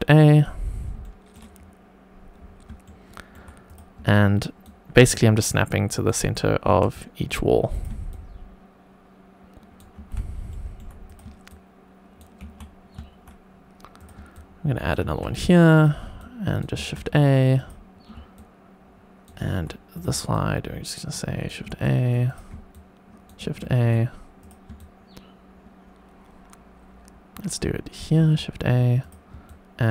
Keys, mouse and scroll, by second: 0.9-1.3 shift+middle drag, 1.5-2.3 scroll up 2, 2.3 scroll down 2, 2.7-3.2 shift+middle drag, 3.6 click, 4.0 shift+right click, 4.9 shift+right click, 6.6 shift+a, 7.6 click, 8.1 shift+right click, 9.9 shift+a, 10.4 shift+middle drag, 11.0 click, 11.4 shift+right click, 12.4 shift+a, 13.9 click, 14.3 shift+right click, 15.0 shift+a, 15.6 click, 16.1-16.7 shift+right drag, 16.7 shift+a, 17.5 click, 18.3 shift+right click, 19.8 click, 20.3 shift+right click, 21.6 shift+a, 22.2 click, 22.6 shift+right click, 23.4 shift+a, 24.3 click, 24.7 shift+right click, 28.1 shift+a, 28.9 click, 29.4 shift+right click.